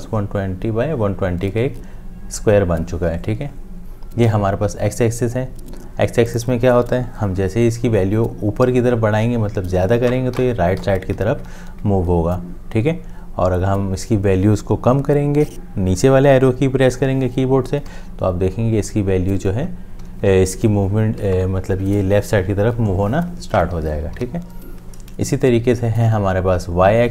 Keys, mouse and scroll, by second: 10.4 Up, 17.9 Down.